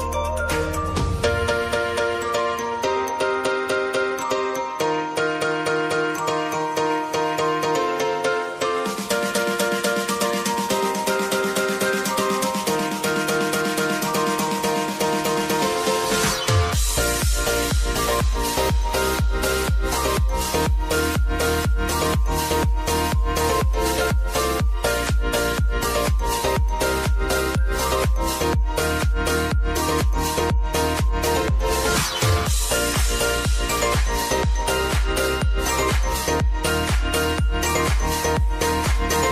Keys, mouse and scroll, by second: 0.6 click, 1.1 ctrl+d, 1.9 click, 3.3 ctrl+k, 3.8 shift+w, 4.5 Return, 5.8 j, 6.7 click, 8.0 ctrl+t, 8.3 click, 8.7 ctrl+a, 9.3 shift+w, 10.6-15.3 drag, 15.3 s, 16.0-19.5 drag, 20.9 r, 22.6 p, 23.0 click, 23.9-24.4 alt+scroll up 1, 25.8-27.8 drag, 30.0 click, 31.0 Right, 32.6-36.1 drag, 36.1 v, 36.8-39.3 drag.